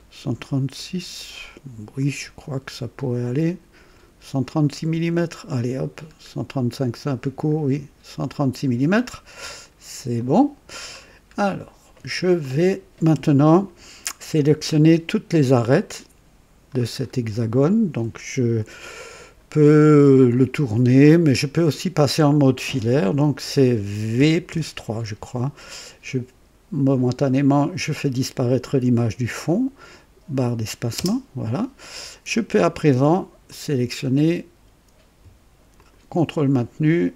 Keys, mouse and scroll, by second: 2.0-5.6 right drag, 6.8 scroll down 1, 7.9 scroll up 1, 10.1 click, 10.8-11.4 scroll down 1, 11.5 middle click, 11.7 right click, 11.7 middle click, 11.9 middle click, 12.1 right click, 15.7-16.8 drag, 17.0 scroll up 2, 24.1 v, 24.4 KP_3, 30.9 space, 30.9 space, 33.4 click, 35.7 ctrl+click.